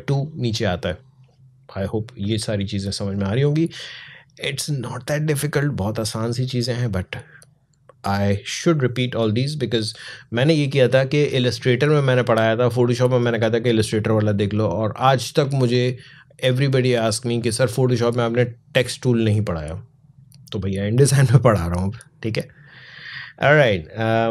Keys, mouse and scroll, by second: 2.6-6.8 drag, 23.9 click.